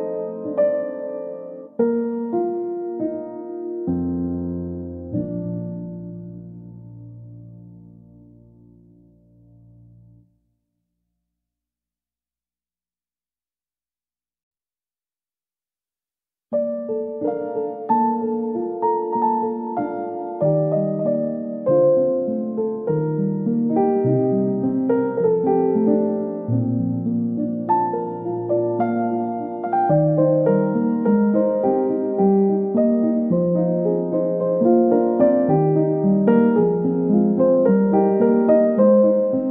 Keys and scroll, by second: 25.2 ctrl+d.